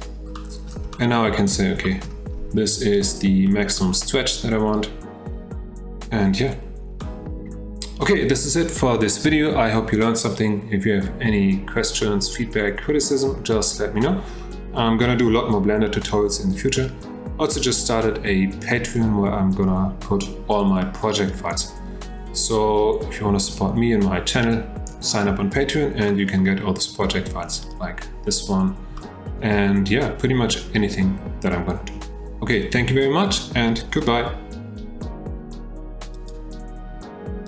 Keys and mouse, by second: 0.4-0.7 shift+middle drag, 0.9-1.5 middle drag, 1.8 shift+middle drag, 3.5-3.8 shift+middle drag, 7.0 middle click, 20.9-24.9 middle drag, 26.1-26.4 middle drag, 29.0 shift+middle drag.